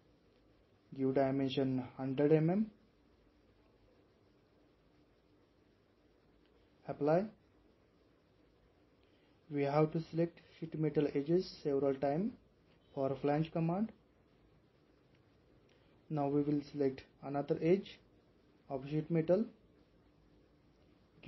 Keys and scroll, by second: 3.5-4.1 typing.